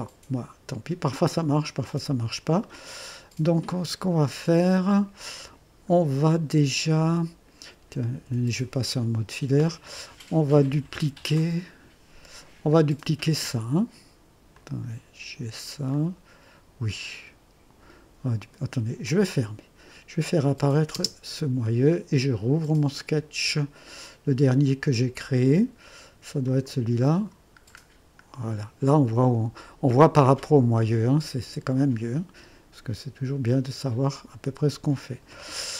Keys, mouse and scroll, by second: 1.6 click, 1.8 typing, 2.7 scroll up 1, 4.5 scroll up 1, 5.5 scroll down 1, 8.2 typing, 12.4 right click, 14.5-15.6 drag, 15.9-18.0 drag, 19.0 click, 20.5 click, 21.0 space, 26.4 click, 27.7-28.4 scroll up 2, 28.9-29.7 right drag, 30.6-33.5 scroll up 2, 33.5-35.4 drag.